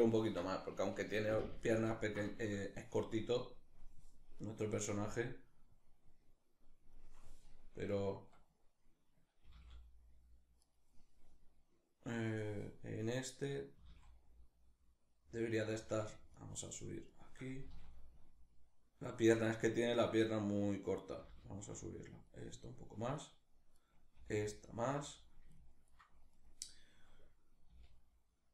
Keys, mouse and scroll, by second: 2.8-4.0 drag, 4.0 right click, 4.8-10.4 drag, 9.1 g, 10.4 right click, 13.4 g, 15.4 right click, 16.0 shift+right click, 17.3 g, 18.9 right click, 20.8 g, 21.9 click, 23.4 right click, 23.8 g, 24.8 click, 25.2 ctrl+middle click, 26.0 right click, 27.3 r.